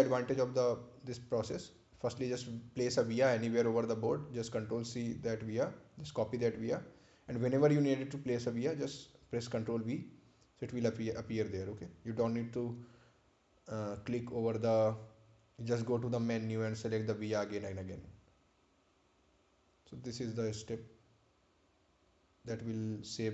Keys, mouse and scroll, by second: 1.2 click, 7.8 click, 11.2 scroll down 1, 11.8-12.5 scroll up 1, 12.9-13.6 scroll down 1, 18.1 click.